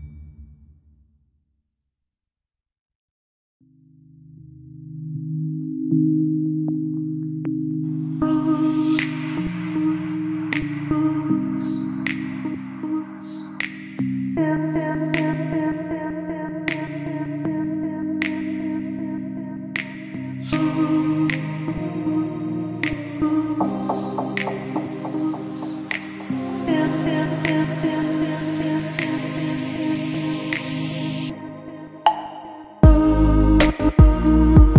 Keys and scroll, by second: 13.8 KP_Subtract, 15.6 a, 16.4 shift+c, 16.8 ctrl+z, 17.2 a, 17.9 ctrl+z, 18.1 KP_Subtract, 18.4 a, 19.0 ctrl+z, 19.2 \, 19.4 a, 21.0 a, 22.7 shift+c, 23.1 ctrl+z, 23.2 a, 24.4 shift+c, 27.0 shift+m, 30.8 ctrl+z, 32.7 a, 33.1 a, 33.6 KP_Subtract, 33.9 a.